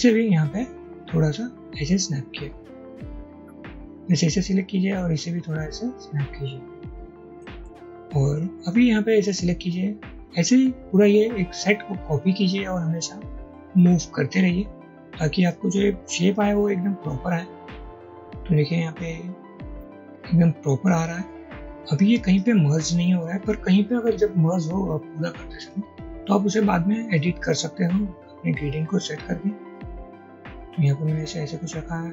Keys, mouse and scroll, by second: 8.0 double click, 10.2 alt+click.